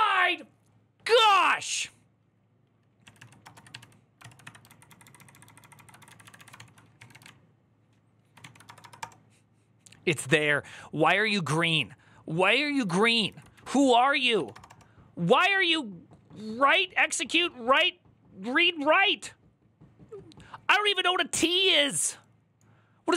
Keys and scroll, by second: 4.0 ctrl+c, 4.0 typing, 4.2 Up, 4.5 ctrl+Left, 4.7 ctrl+Left, 4.9 ctrl+Left, 5.8 Left, 5.9 Right, 6.0 Right, 6.1 Right, 6.3 ctrl+w, 6.5-7.4 typing, 7.7 ctrl+Right, 7.7-8.2 ctrl+Right, 8.2 ctrl+w, 8.5 BackSpace, 8.6 BackSpace, 8.8 Return, 11.3 Up, 12.2 ctrl+Left, 12.4 ctrl+Left, 12.6 ctrl+Left, 13.4 ctrl+Left, 13.4 Right, 13.5 Right, 13.7-14.7 typing.